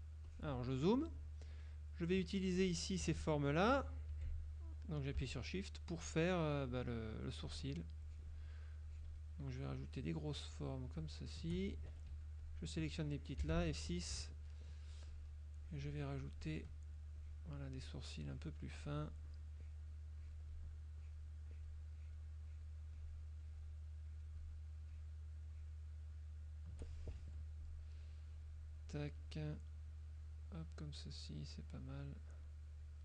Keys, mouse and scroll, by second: 0.3 click, 1.5 click, 2.3 F2, 2.7 click, 4.2 F6, 6.8 shift+click, 7.5 shift+click, 8.1 shift+click, 8.9 shift+click, 9.9 shift+click, 10.5 shift+click, 11.1 shift+click, 12.3 F2, 12.5 click, 13.5 F6, 15.1 shift+click, 15.7 shift+click, 16.3 shift+click, 17.3 shift+click, 17.9 shift+click, 18.4 shift+click, 18.9 shift+click, 19.7 shift+click, 20.3 shift+click, 21.1 shift+click, 21.6 shift+click, 22.1 shift+click, 22.6 shift+click, 23.1 shift+click, 24.2 shift+click, 25.0 shift+click, 25.7 shift+click, 26.3 shift+click, 27.3 shift+F2, 28.4 click, 28.9 click, 29.9 click, 31.0-32.7 drag, 32.9 click.